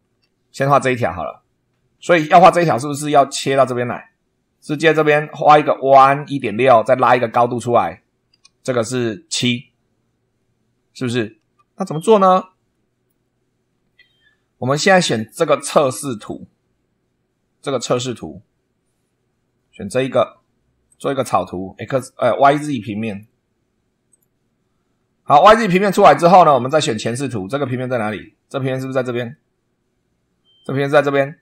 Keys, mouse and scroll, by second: 0.0 super+2, 2.2-4.5 middle drag, 4.5 right click, 11.3 super+2, 12.6 click, 15.0 click, 20.8 click, 23.0 click, 24.0 click, 26.9 click, 27.7-28.2 scroll down 2, 29.2 click, 29.4 right click, 30.0 click.